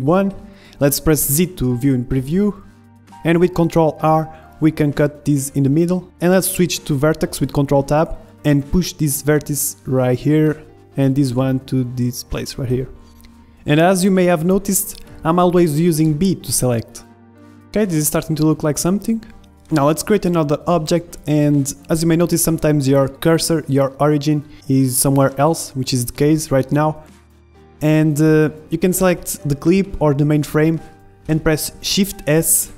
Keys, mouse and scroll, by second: 1.9 ctrl+r, 3.9 ctrl+Tab, 5.4 a, 5.8 b, 6.5-8.1 drag, 7.9 a, 8.1 b, 8.3 click, 9.2-11.1 drag, 10.9 a, 11.1 b, 11.9-13.9 drag, 13.3 Tab, 13.9-15.7 middle drag, 15.1 z, 17.1 middle click, 17.6 KP_1, 18.3 middle click, 19.0 shift+c, 21.1-23.1 middle drag, 23.1-25.0 right drag, 27.2 shift+s, 30.9 shift+s.